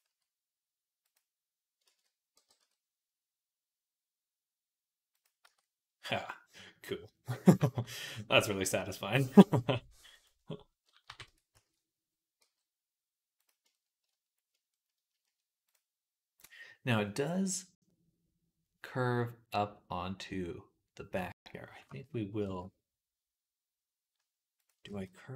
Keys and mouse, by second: 1.7-11.3 ctrl+middle drag, 1.7 ctrl+z, 2.2 g, 5.5 Tab, 10.9 KP_3, 11.1 Tab, 11.4 a, 12.2 g, 13.6 shift+middle click, 14.4 shift+middle click, 15.0 shift+middle click, 22.3 r, 24.7 ctrl+z.